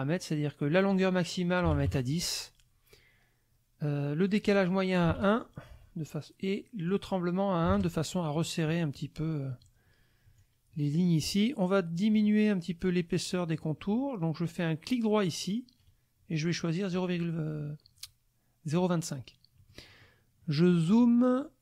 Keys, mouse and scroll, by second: 0.6 click, 1.7 KP_0, 1.9 KP_Enter, 4.3 click, 5.0 KP_1, 5.1 KP_Enter, 6.9 click, 7.7 KP_1, 8.0 KP_Enter, 10.4-11.5 drag, 15.8 right click, 16.9 click, 19.6 click, 19.9 click, 20.4 click.